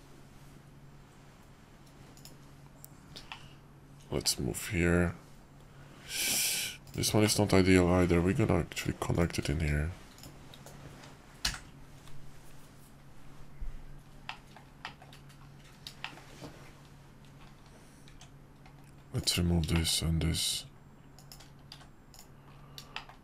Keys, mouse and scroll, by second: 3.3-6.9 shift+middle drag, 7.2 shift+middle click, 9.1 click, 10.2 shift+click, 11.5 j, 14.2 middle click, 14.8 shift+middle click, 16.0 shift+middle click, 18.1 Tab, 19.1 click, 19.7 shift+click, 21.2 shift+click, 21.7 x, 22.9 shift+middle click.